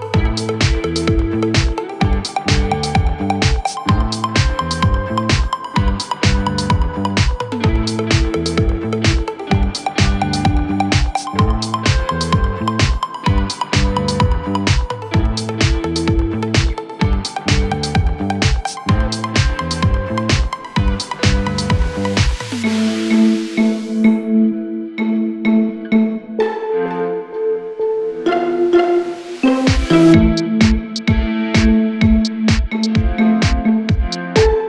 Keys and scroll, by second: 15.3 F3, 16.5 Escape.